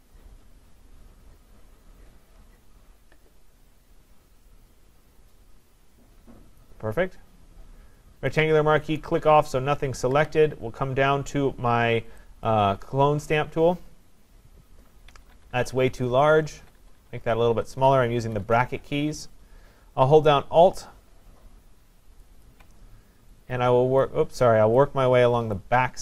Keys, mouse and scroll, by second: 6.6 click, 8.4 click, 9.0 click, 12.5 click, 15.1-18.5 typing, 22.5 alt+click, 24.0 click, 25.6 click.